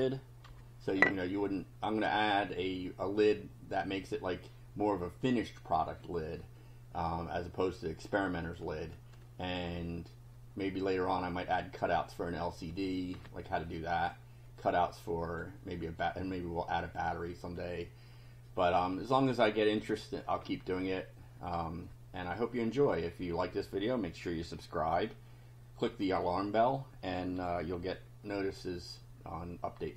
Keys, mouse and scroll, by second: 0.4 F5, 13.3 click, 14.7 click, 19.4 click.